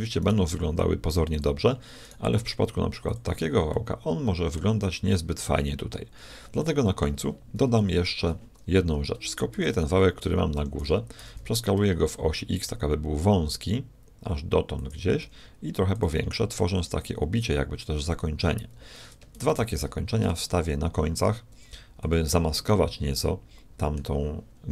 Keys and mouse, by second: 0.2 right click, 0.9 right click, 1.9 right click, 3.7-4.8 middle drag, 6.6-8.4 middle drag, 7.7 KP_1, 9.5 shift+d, 11.2 s, 15.2 s, 16.8-18.7 drag, 19.3 shift+d, 22.7-24.5 middle drag.